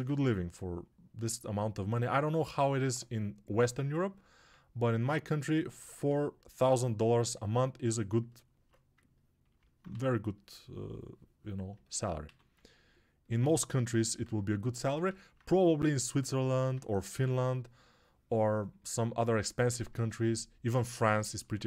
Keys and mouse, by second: 9.8 2, 12.1 1, 17.0 2.